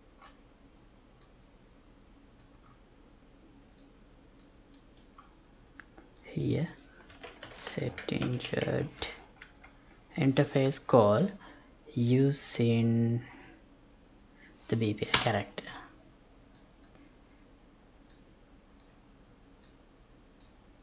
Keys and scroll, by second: 7.5 space, 9.4 Up.